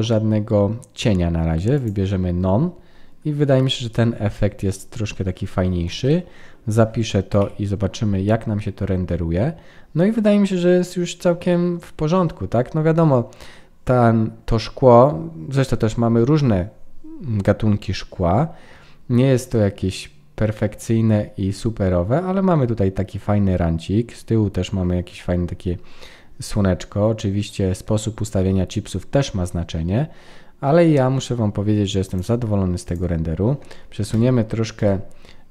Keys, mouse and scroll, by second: 5.9 ctrl+s, 7.5 F12, 32.8 click, 34.1 g.